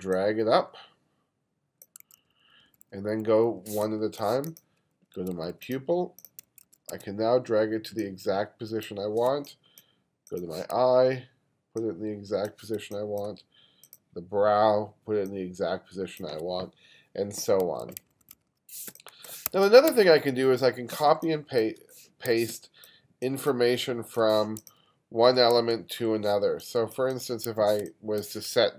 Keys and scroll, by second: 2.1 2, 3.9 space, 5.2 2, 5.8 2, 6.5 2, 9.3 space, 12.9 space, 18.9 space, 19.5 1, 19.9 2, 21.1 space, 22.6 space, 25.3 2, 26.5 space, 27.9 space.